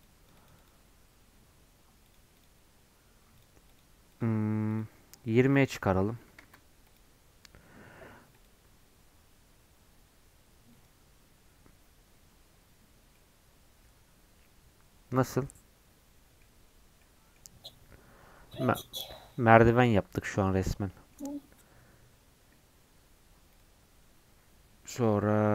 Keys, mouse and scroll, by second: 13.0 scroll down 1, 13.1-16.1 middle drag, 16.8 scroll up 1, 17.0 middle click, 17.9-18.8 scroll up 1, 18.8-22.5 middle drag, 23.5-25.5 drag.